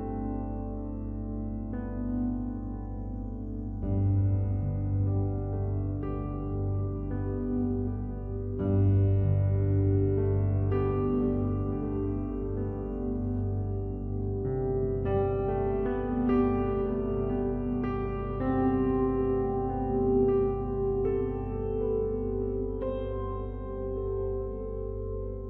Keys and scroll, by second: 22.7 ctrl+z.